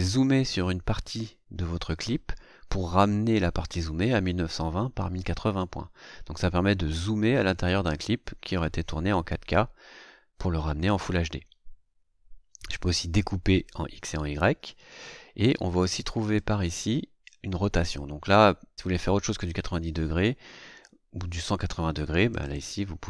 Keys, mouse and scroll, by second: 16.3 click, 22.2 click.